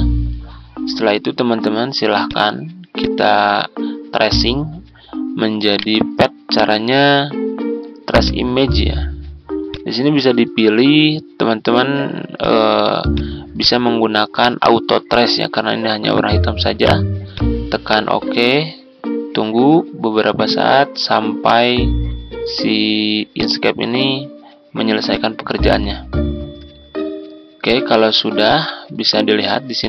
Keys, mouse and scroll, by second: 5.7 right click, 8.1-29.8 drag.